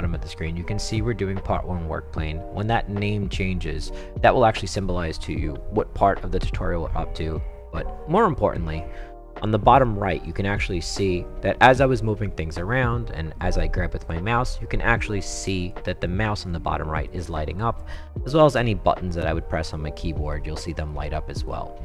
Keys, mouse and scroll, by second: 13.4-14.1 drag, 14.5-15.7 right drag, 16.1-16.5 right drag, 17.1-17.6 right drag, 19.8 s, 20.3 s, 20.6 s, 20.9 s.